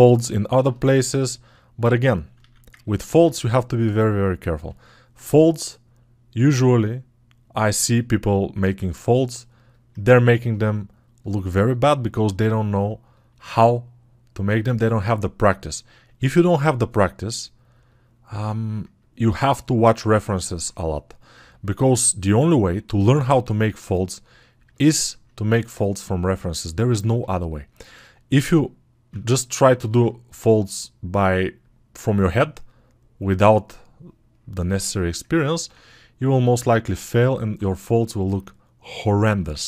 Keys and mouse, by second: 6.1-20.2 alt+drag, 29.2-39.6 alt+right drag.